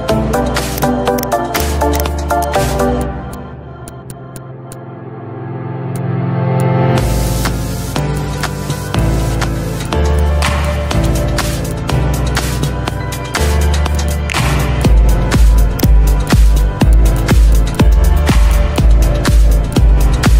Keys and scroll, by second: 18.1 Delete.